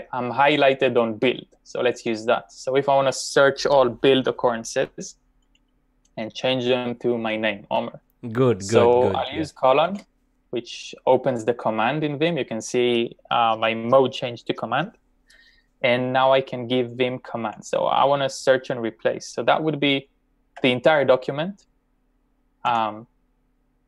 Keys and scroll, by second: 9.9 shift+;, 20.9 shift+5, 22.4-23.3 typing.